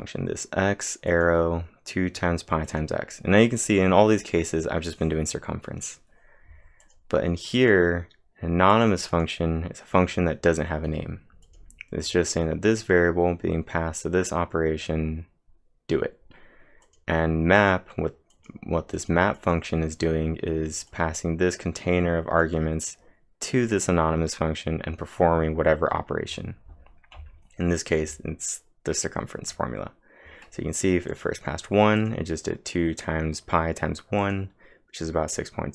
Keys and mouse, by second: 1.1 click, 2.7 click, 6.6-7.3 typing, 6.8 click, 13.4 click, 16.8 click, 17.6-25.7 drag, 21.0-21.7 typing, 31.1 click, 32.0-34.2 drag, 34.2-35.7 drag.